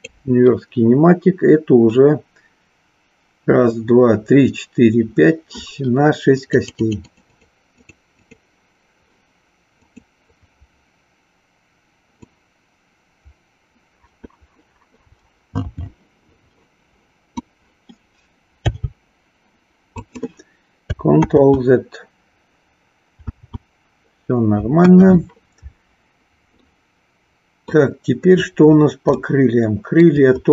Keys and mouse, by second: 6.4 click, 7.1 click, 7.8 click, 8.2 click, 9.8-11.1 drag, 12.2-17.5 drag, 18.5 g, 20.1 click, 21.2 ctrl+z, 24.7 KP_1, 26.7-27.7 middle drag, 29.2-30.1 shift+middle drag.